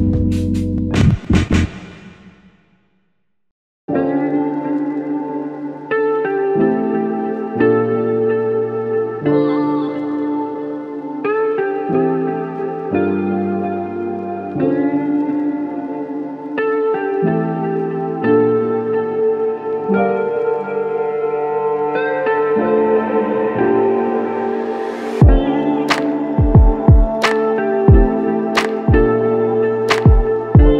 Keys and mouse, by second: 0.3 alt+click, 3.0 double click, 6.0 shift+click, 11.8 shift+click, 17.0 f, 17.1 shift+click, 21.4 alt+shift+click, 24.9 alt+click, 25.4 alt+shift+click, 26.5 shift+click, 28.7 double click, 29.5 shift+click, 29.9 shift+double click, 30.4 shift+click.